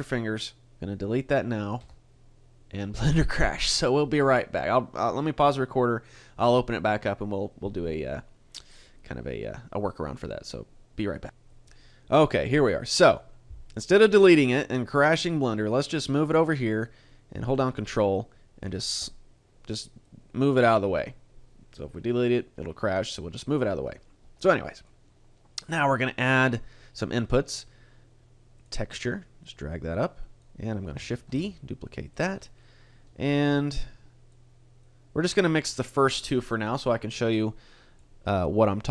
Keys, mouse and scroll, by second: 1.8 Delete.